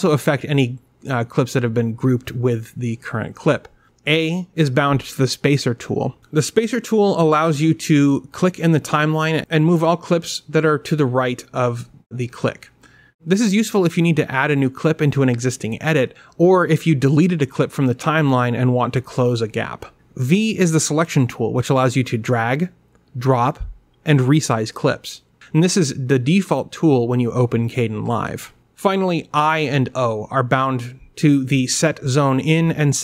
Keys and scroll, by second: 11.4 a, 20.6 v, 30.9 i.